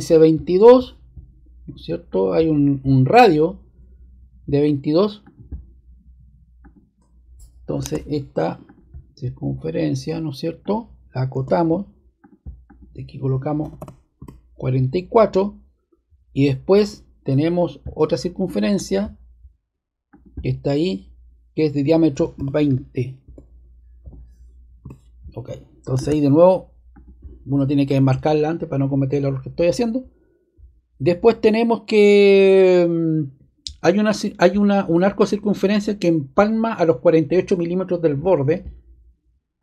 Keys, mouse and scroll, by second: 2.0 click, 5.2 click, 6.5 click, 7.7 super+z, 8.6 click, 11.3 d, 12.1 click, 12.6 click, 13.5-14.1 typing, 18.6 click, 18.7 click, 20.0-21.2 drag, 22.3-24.5 typing, 24.8 Return, 25.9 ⟲, 26.9 click, 27.8 click, 28.4 click, 39.5 click.